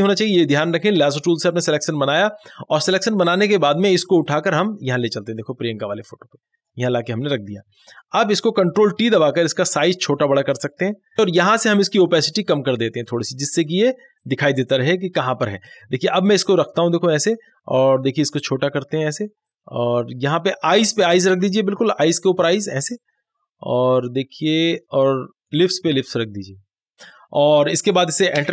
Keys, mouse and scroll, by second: 3.3-9.6 drag, 9.6 ctrl+t, 10.5 click, 11.9-24.7 drag, 24.7 Left, 25.7-27.3 drag, 28.4 Return.